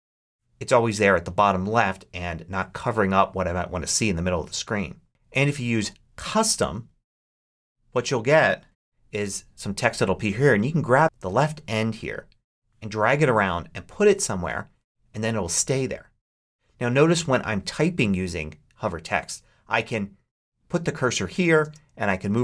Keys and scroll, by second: 0.0-0.9 typing, 8.6 shift+s, 21.5 space.